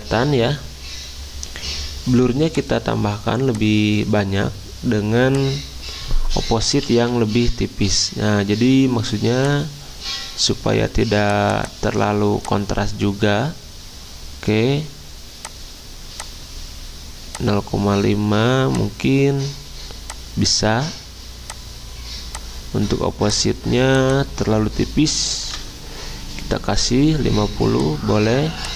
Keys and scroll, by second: 6.6-7.6 typing, 25.0-26.0 typing.